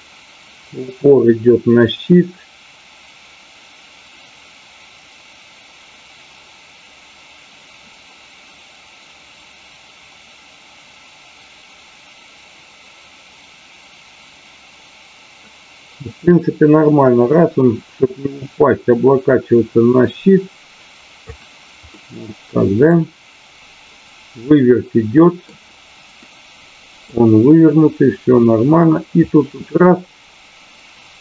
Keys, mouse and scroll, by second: 21.9-22.9 middle drag, 24.5-25.3 middle drag, 26.2 middle click, 28.7-31.2 drag.